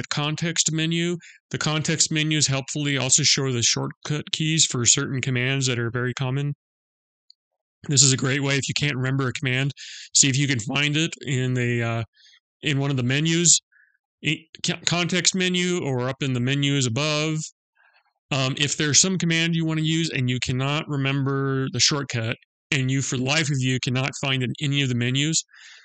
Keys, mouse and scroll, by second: 14.1 right click, 15.8 click.